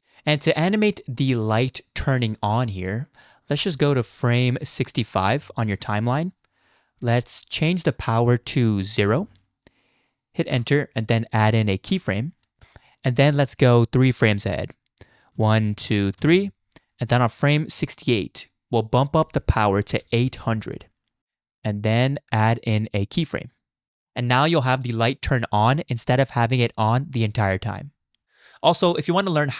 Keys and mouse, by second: 0.0-0.6 drag, 0.0-0.6 middle drag, 0.0-0.6 right drag, 1.2 click, 1.2 middle click, 1.2 right click, 5.3 Right, 8.0-10.6 drag, 11.9 click, 15.4 Right, 15.8 Right, 16.2 Right, 19.0-21.2 drag, 20.4 0, 23.5 click, 23.9-27.6 drag.